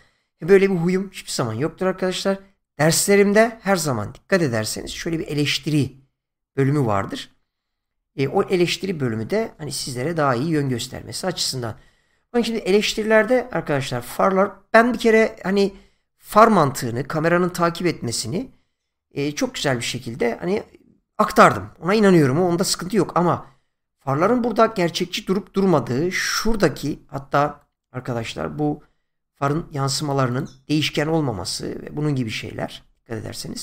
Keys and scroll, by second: 9.6 space, 26.7 <, 30.8 space.